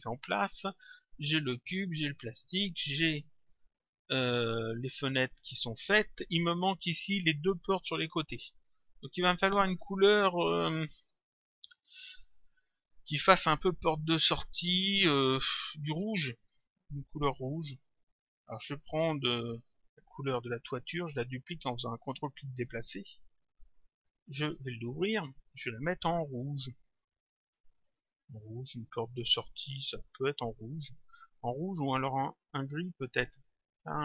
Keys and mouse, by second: 6.6 click, 8.0 click, 20.1 click, 21.2 ctrl+click, 24.3 click, 26.0 click, 29.2 click, 31.7 click.